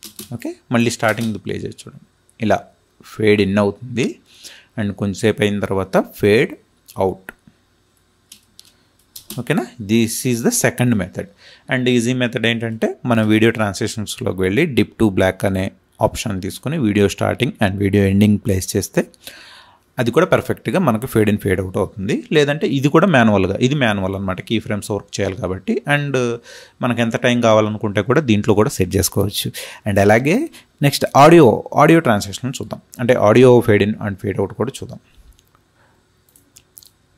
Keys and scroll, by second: 0.0 space, 9.0 space.